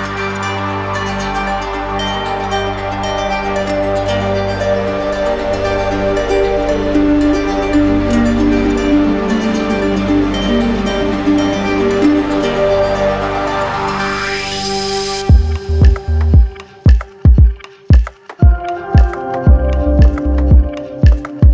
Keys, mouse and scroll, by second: 0.5 right click, 1.1 alt+right click, 2.0 right click, 2.9 click, 4.4 right click, 7.5 click, 8.4 click, 9.7 click, 10.1 alt+click, 10.7 shift+click, 11.7 click, 12.2 shift+click, 14.6 r, 18.7 click, 19.7 click.